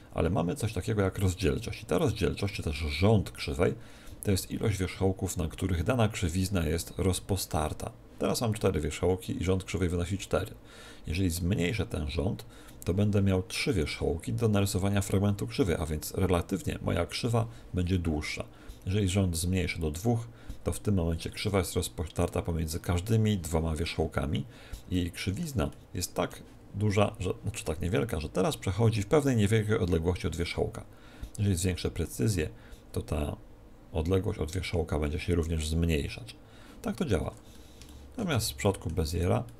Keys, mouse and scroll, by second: 11.5-13.5 drag, 19.9-21.7 drag, 24.9-32.0 middle drag, 32.0-33.8 drag, 36.8-39.5 middle drag, 38.3 Tab, 39.1-39.5 right drag.